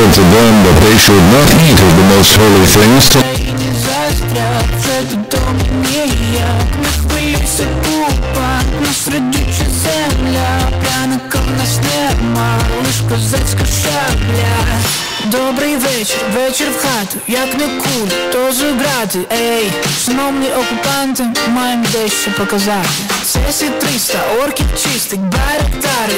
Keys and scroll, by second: 3.3 Page_Down, 18.0 Page_Down.